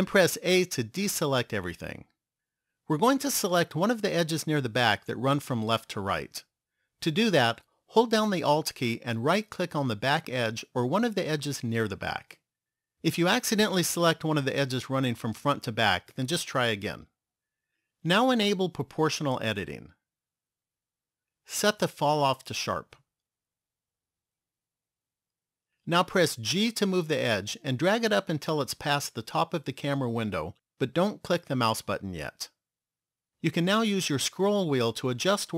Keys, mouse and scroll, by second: 0.5 a, 11.3 alt+right click, 18.6 click, 24.9 click, 26.4 g.